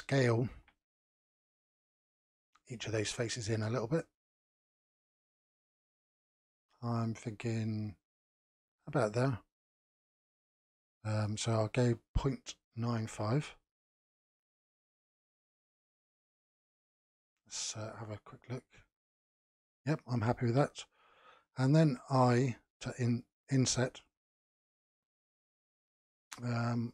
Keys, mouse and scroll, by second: 0.5 s, 11.4-14.5 drag, 16.3-18.0 middle drag, 18.0 click, 18.6-22.1 middle drag.